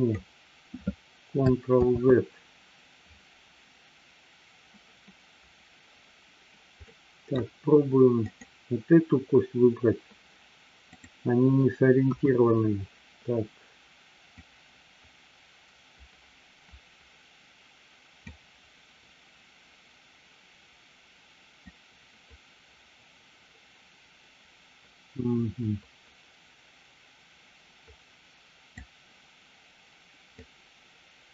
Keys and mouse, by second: 2.2 ctrl+z, 6.9 middle click, 8.4-9.9 drag, 12.0 KP_1, 14.5-18.6 drag, 21.7-29.1 drag, 30.4-31.3 drag.